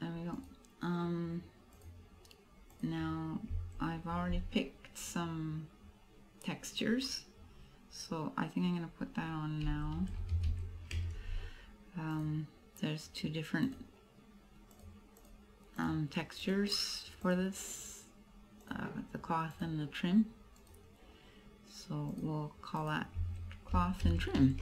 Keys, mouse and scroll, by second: 0.5 right click, 1.9 click, 12.1 click, 13.7 click, 15.3 click, 15.9 click, 17.3 click, 19.8 click, 20.6 right click, 22.2 click, 22.9 click.